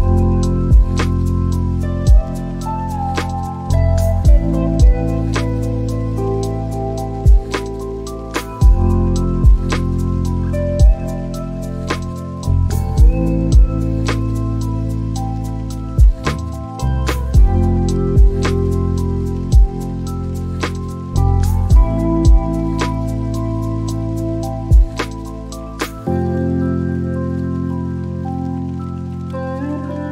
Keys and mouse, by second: 0.1-1.4 drag, 2.4-4.3 drag, 13.3 click, 14.3 shift+a, 17.9 s, 20.0 click, 27.2 click.